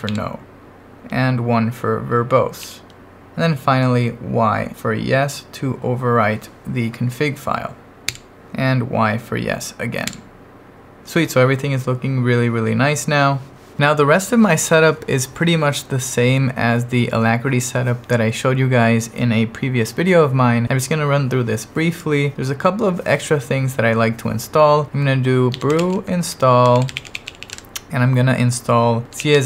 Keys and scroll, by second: 0.1 n, 2.6 1, 8.1 y, 10.1 y, 25.3-27.8 typing, 28.8-29.4 typing.